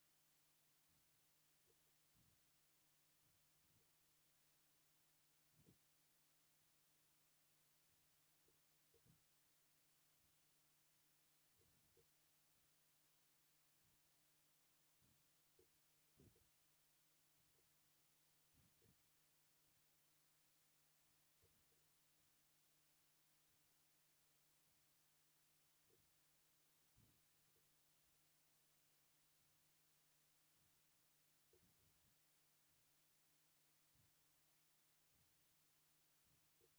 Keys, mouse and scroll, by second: 1.8 scroll down 2, 1.9 shift+middle click, 3.8 k, 5.6 k, 8.6 shift+middle click, 8.9 k, 11.9 k, 15.7 shift+middle click, 16.3 k, 17.7 scroll down 1, 17.8 shift+middle click, 18.2 shift+middle click, 18.3 scroll up 2, 18.8 k, 21.7 k, 26.1 shift+middle click, 26.6 scroll down 1, 26.9 shift+middle click, 27.2 shift+middle click, 27.6 k, 31.9 k.